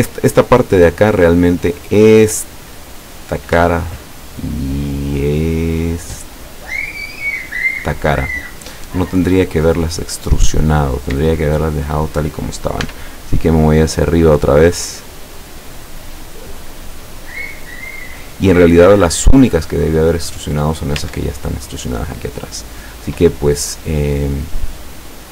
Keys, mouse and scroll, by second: 1.7-2.4 scroll up 2, 3.2 right click, 3.7-6.3 shift+middle drag, 7.7 shift+right click, 8.3-8.7 shift+scroll down 2, 8.8 scroll down 2, 9.3-10.4 middle drag, 10.5 scroll up 2, 11.3-12.2 shift+middle drag, 12.9 e, 17.8 click, 19.0-20.0 middle drag, 21.0 Tab, 21.5-22.2 middle drag, 22.8 scroll down 1, 23.1 middle click, 24.0 middle click, 24.3-24.7 scroll down 1, 24.7-25.3 middle drag.